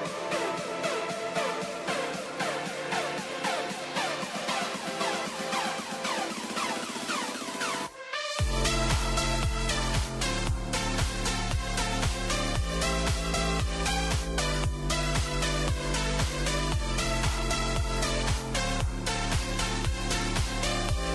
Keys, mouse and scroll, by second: 2.0 click, 2.5 middle click, 3.0-3.5 scroll up 3, 3.5-4.9 middle drag, 4.9 click, 5.3 scroll down 2, 5.5-9.5 middle drag, 9.5-11.0 right drag, 11.0 click, 11.4-13.2 middle drag, 13.2 scroll down 3, 13.5-14.0 middle drag, 14.0-14.5 scroll up 1, 14.5-15.8 shift+middle drag, 15.8 click, 16.7 click, 17.3 click, 17.6-18.2 middle drag, 18.2 click, 18.7 scroll down 1, 19.0-20.2 shift+middle drag, 20.2 click.